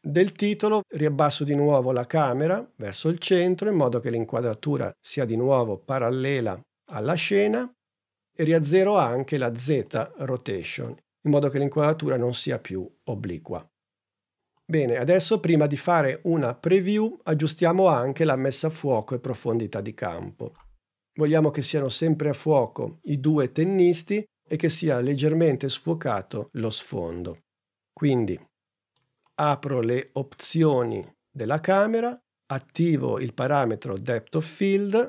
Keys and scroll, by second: 10.8 0.